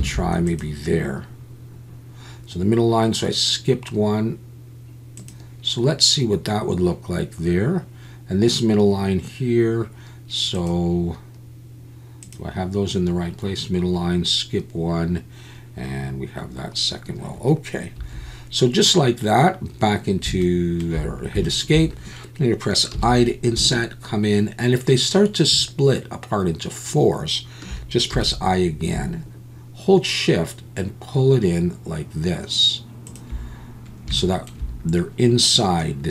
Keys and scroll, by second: 0.0 c, 18.0 Escape.